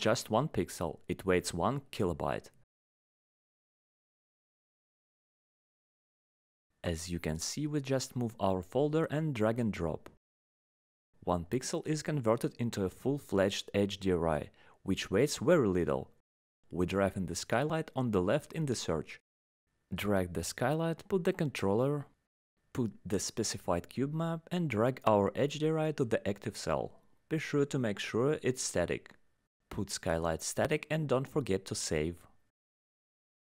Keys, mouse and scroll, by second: 1.0 click, 3.2 alt+scroll, 3.3 alt+scroll up 3, 4.1-6.7 alt+scroll, 6.7 click, 7.5 click, 8.3 click, 12.2 click, 12.9 click, 13.4 click, 15.5 click, 15.9 click, 20.0 click, 22.5 click, 23.4 click, 25.0 click, 27.7 click, 30.1 click.